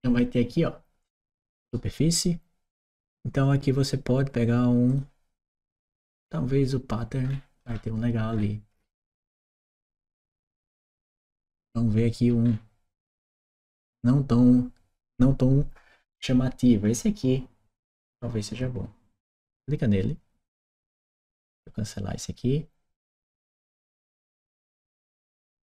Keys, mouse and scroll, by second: 1.4 click, 4.6 click, 7.0-8.5 scroll down 1, 8.5 scroll up 1, 9.4-9.9 scroll up 1, 9.9 click, 11.2-12.1 scroll down 1, 12.1-12.5 scroll down 1, 12.8-13.1 scroll down 1, 19.3 click, 21.0 click, 23.9 click.